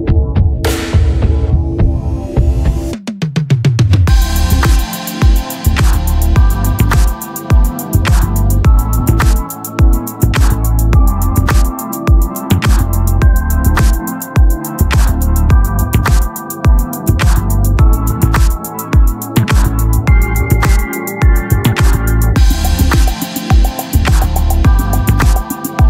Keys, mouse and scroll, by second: 0.8 ctrl+z, 1.0 click, 2.7 Tab, 5.5 ctrl+Tab, 6.6-8.1 right drag, 8.1 ctrl+Tab, 12.2 middle click, 12.7-14.7 right drag, 14.7 middle click, 15.6 p, 16.3 Tab, 16.9-18.3 right drag, 18.3 t, 19.3 click, 20.0-21.3 right drag, 21.3-22.7 drag, 21.6-23.8 right drag, 23.8 ctrl+click, 24.1 ctrl+z, 24.8-25.8 right drag.